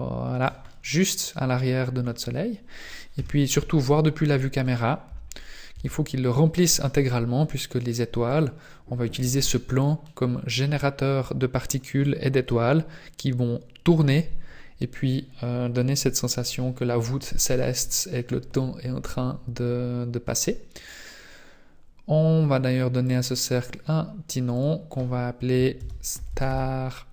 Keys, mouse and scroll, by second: 0.6 middle click, 2.0 scroll down 3, 3.2 KP_0, 4.6 right click, 5.0 Tab, 5.7 s, 9.2 Tab, 23.0 click.